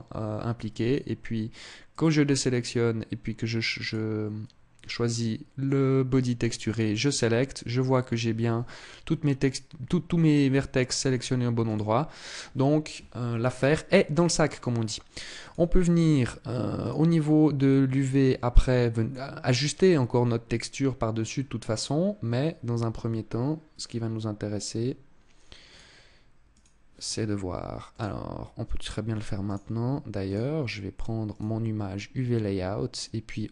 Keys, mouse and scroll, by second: 1.6 click, 3.5 click, 6.3 click, 11.3 click, 15.1 click, 18.8 click, 25.3 click, 27.5 click.